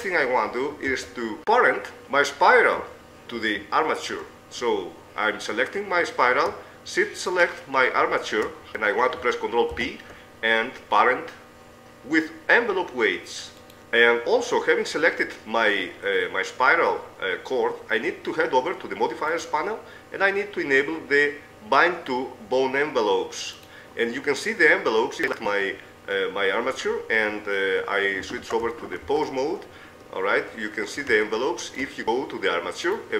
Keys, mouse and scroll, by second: 0.9 Tab, 2.0 right click, 7.3-8.7 right drag, 8.7 middle click, 9.3 right click, 9.7 ctrl+p, 13.7-14.7 drag, 14.9 middle click, 17.9-19.1 middle drag, 20.9-23.4 middle drag, 25.2-26.8 right drag, 29.4 ctrl+Tab, 30.8-33.1 middle drag.